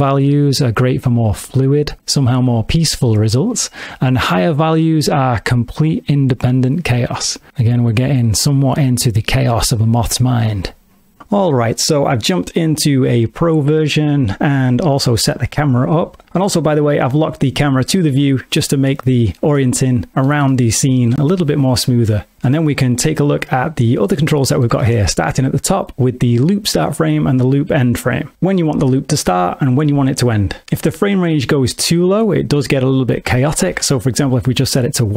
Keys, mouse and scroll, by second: 2.0 click, 4.4 click, 16.3 n, 20.1 ctrl+middle click, 20.5 middle click, 21.3 middle click, 22.1 middle click, 22.5 ctrl+middle click, 24.3 shift+middle click, 32.6 click.